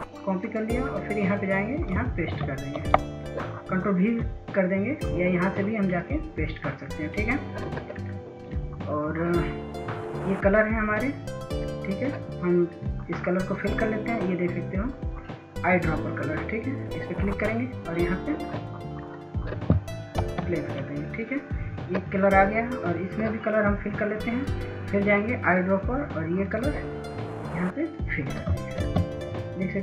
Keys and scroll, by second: 6.8 ctrl+v, 24.8 ctrl+space.